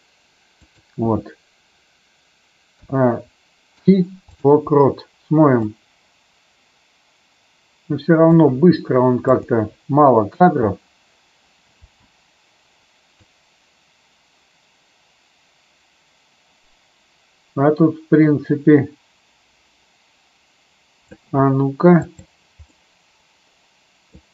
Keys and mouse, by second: 2.7 a, 3.7 i, 5.7-8.3 drag, 10.3 space, 11.8 space, 13.1-21.2 drag, 22.0 click, 22.7-24.1 middle drag.